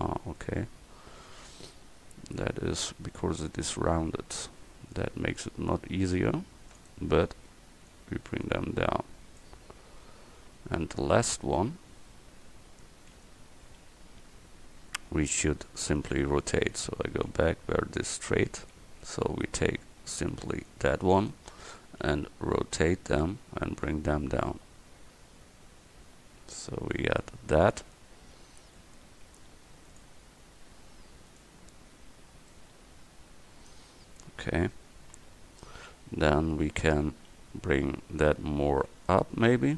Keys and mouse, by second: 1.8 KP_1, 3.4 a, 4.1 c, 7.0 click, 10.5 a, 13.2 ctrl+z, 14.2 a, 16.9 ctrl+z, 17.4 ctrl+z, 18.6 a, 19.7 v, 20.4 c, 21.3-23.0 drag, 22.1 r, 29.9-32.9 drag, 32.9 middle click, 35.1 KP_1, 36.3 a, 36.7 v, 38.2 a.